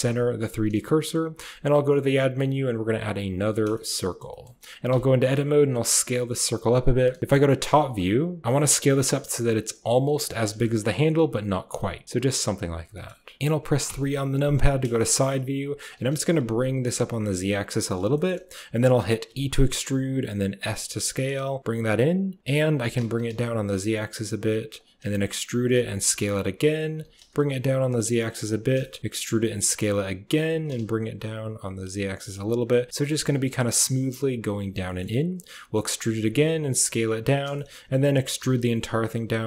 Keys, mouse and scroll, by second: 1.2 shift+a, 3.6 shift+click, 3.9 drag, 4.2 shift+click, 4.8 Tab, 5.3 s, 7.2 KP_7, 8.4 s, 10.5 shift+click, 11.2 s, 12.0 s, 12.8 shift+click, 13.4 KP_1, 13.4 KP_7, 13.7 KP_3, 14.8 shift+click, 15.7 g, 18.0 shift+click, 19.1 e, 22.5 typing, 24.8 e, 26.8 g, 28.7 shift+click, 29.0 e, 29.1 s, 30.3 g, 32.6 click, 34.7 click, 35.4 e, 35.9 s, 37.4 shift+click, 38.0 e.